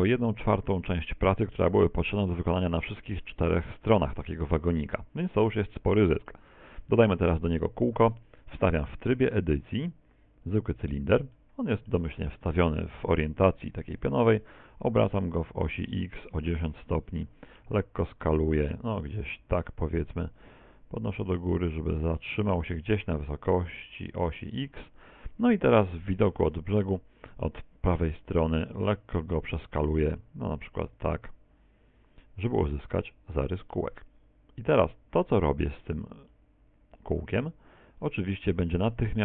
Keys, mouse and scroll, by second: 0.0 middle click, 3.3 shift+middle click, 5.7 middle click, 7.1 KP_1, 8.0 shift+a, 11.3 shift+middle click, 14.7 r, 17.7 s, 19.7 click, 20.4 click, 21.7-22.3 scroll up 4, 23.8 s, 24.7 click, 25.9 KP_1, 26.0 KP_3, 26.3 z, 27.3 s, 32.8 ctrl+click, 33.7 click, 36.3 middle click.